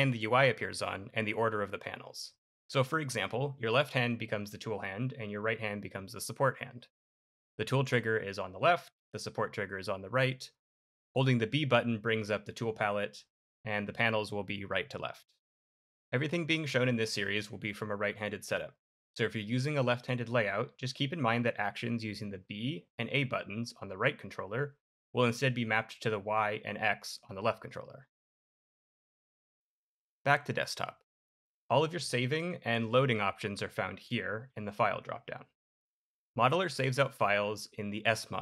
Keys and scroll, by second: 22.8 b, 26.0 y.